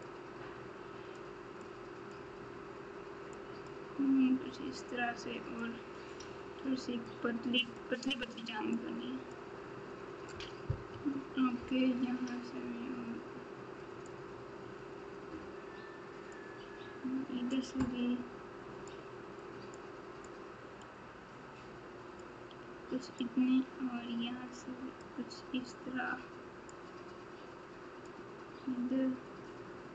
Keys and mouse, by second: 0.0-1.1 drag, 1.6 click, 3.3 click, 5.5 click, 7.0 click, 8.7 click, 10.9 KP_1, 14.0-16.3 drag, 18.9 click, 20.2-22.2 drag, 23.1-25.0 drag, 26.7-28.0 drag.